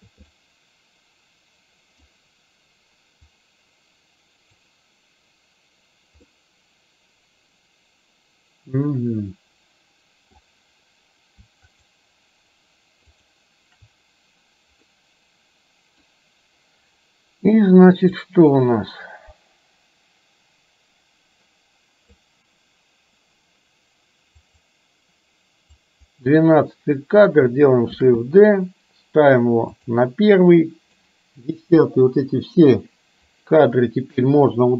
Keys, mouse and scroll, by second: 0.5-2.1 middle drag, 3.4-4.8 drag, 6.3-10.4 middle drag, 11.8 shift+click, 13.1 shift+click, 15.0-16.1 middle drag, 18.3-22.3 drag, 24.5 click, 25.8-26.1 drag, 28.1 shift+d, 30.6-31.1 drag, 31.9 Delete, 33.4-34.3 drag.